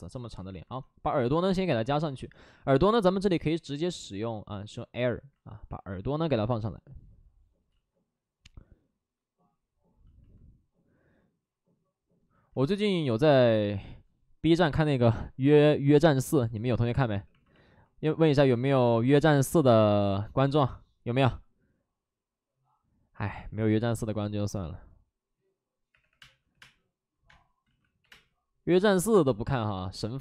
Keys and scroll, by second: 0.0 space, 0.8 alt+s, 5.7 alt+s, 7.6 ctrl+z, 13.8 ctrl+z, 16.1 alt+s, 17.1 w, 18.4 alt+s, 26.0 3, 26.1 space, 26.4 3, 26.5 space, 27.6 ctrl+z, 27.6 space, 27.9 3.